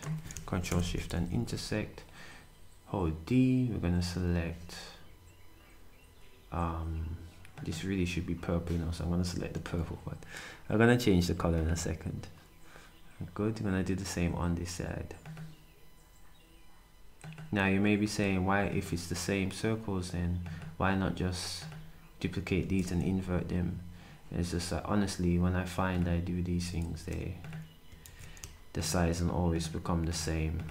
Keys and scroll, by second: 0.7 8, 1.3 d, 9.5 s, 22.6 s, 26.5 s, 28.0 d.